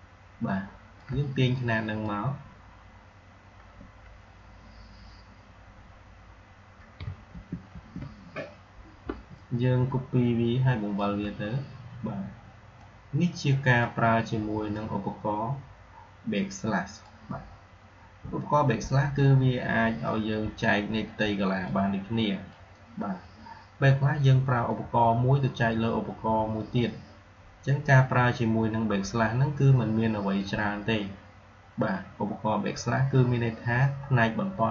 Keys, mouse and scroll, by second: 6.9 click, 7.1 ctrl+c, 7.5 ctrl+f, 9.2-11.1 shift+drag, 21.5-22.4 drag.